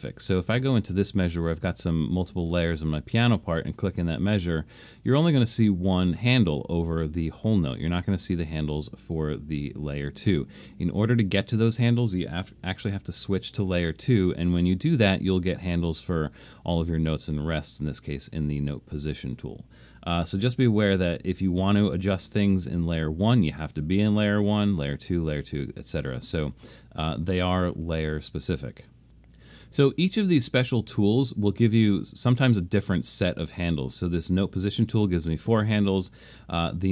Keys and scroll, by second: 13.1 alt+super+2, 21.8 alt+super+1.